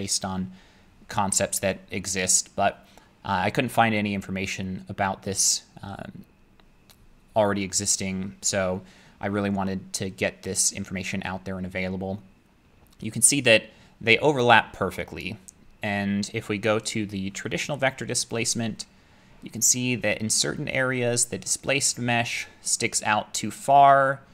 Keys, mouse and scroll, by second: 18.3 click, 23.4-24.3 drag.